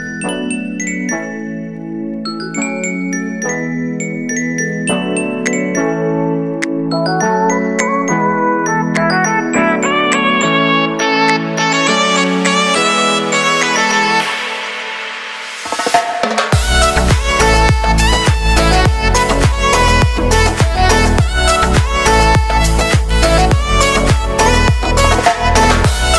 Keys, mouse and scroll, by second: 8.1 space, 9.8 click, 10.9 space, 12.2 click, 12.6 space, 14.9 click, 14.9 click, 16.3 space, 19.0 click, 19.7 space, 22.1 click, 22.7 ctrl+d, 23.5-26.1 drag.